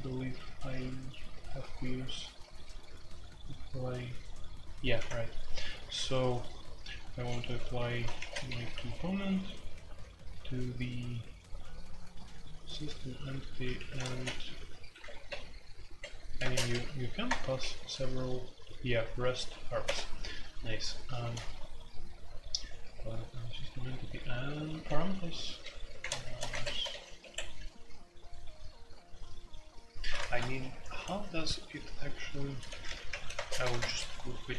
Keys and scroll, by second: 0.0-34.5 typing, 8.7 Escape, 13.7 Escape, 14.9 Escape, 17.2 Return, 27.2 Escape, 30.2 alt+2.